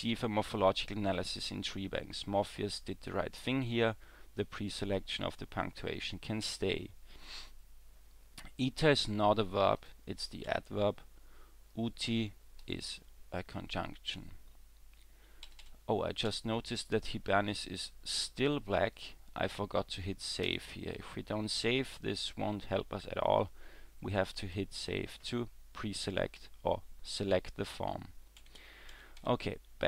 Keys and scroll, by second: 6.5 w, 10.5 w, 15.5 e, 15.6 e, 16.3 e, 28.4 w, 28.6 w, 28.9 w, 29.2 w.